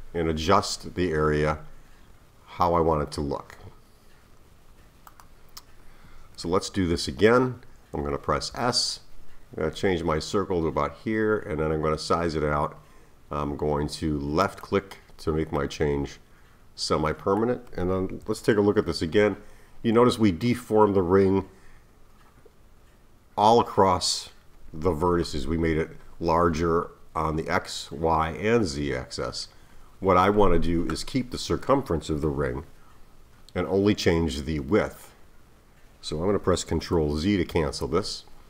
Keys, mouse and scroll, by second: 8.5 s, 15.6-18.2 middle drag, 18.2 KP_1, 18.8-19.4 scroll down 1, 19.4-21.8 scroll up 2, 21.8-22.5 scroll up 1, 37.5 z.